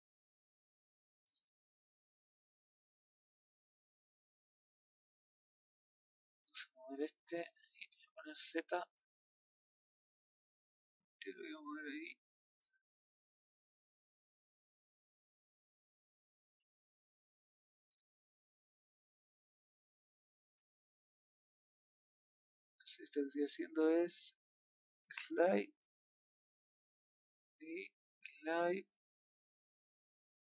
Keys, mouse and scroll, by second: 0.7 click, 2.8-4.3 drag, 5.4 click, 6.3 click, 7.7 middle click, 7.9 z, 8.9-10.5 middle drag, 13.0 click, 14.6-16.0 middle drag, 16.0 click, 17.7 middle click, 18.8-19.8 middle drag, 19.8-20.3 scroll up 3, 20.3 middle click, 21.0 click, 21.3 g, 24.6-26.1 drag, 29.2 middle click, 30.0-30.5 scroll down 2.